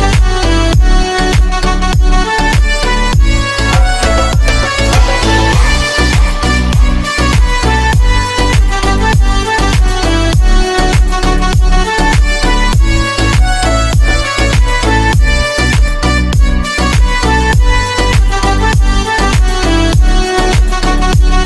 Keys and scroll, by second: 0.0 ctrl+q, 1.9 c, 3.4 F3, 3.9 Escape, 4.5 F3, 4.7 Escape, 10.9 F9.